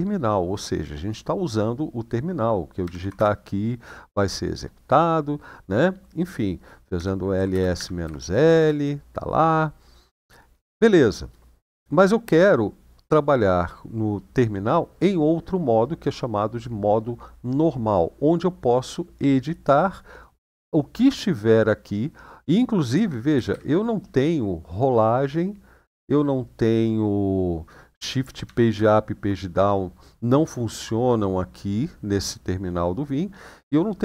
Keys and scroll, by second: 2.6 typing, 2.9 Return, 6.7-8.3 typing, 22.7 Up, 23.1 Down, 23.2 Down, 28.2 shift+Page_Up, 28.5 shift+Page_Down.